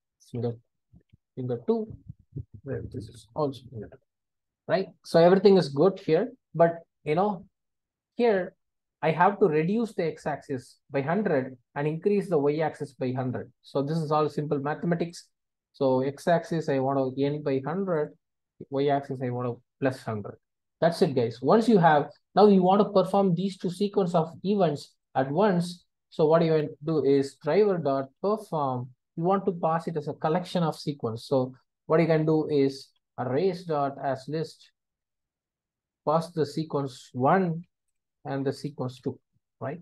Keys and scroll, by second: 3.4 Delete, 25.9 Tab, 27.5 Tab, 27.7 Return, 30.7 Return, 33.7 Return, 37.8 Return.